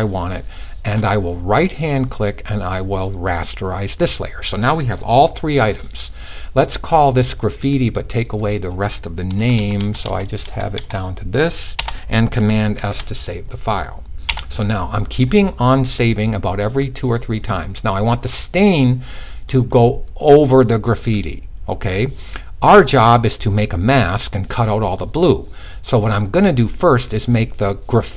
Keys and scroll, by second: 12.3 s.